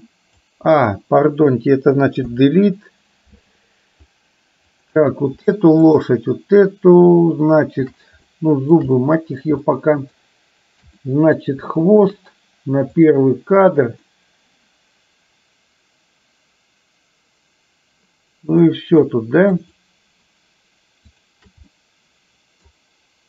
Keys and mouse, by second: 2.3 Delete, 4.8 click, 6.0 shift+click, 8.3-8.7 shift+middle drag, 9.1 middle click, 9.7-10.2 shift+middle drag, 11.1 middle click, 12.0 shift+click, 13.1 click, 14.2-18.7 middle drag, 19.6 shift+click, 21.2 shift+click, 21.7-22.7 middle drag.